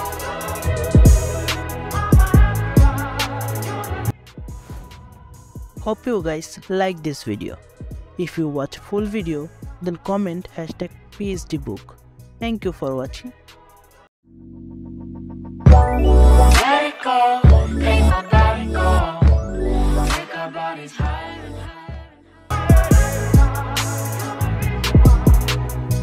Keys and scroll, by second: 0.2 ctrl+z, 1.5 b, 2.2 ], 3.1 x, 3.8 ctrl+-.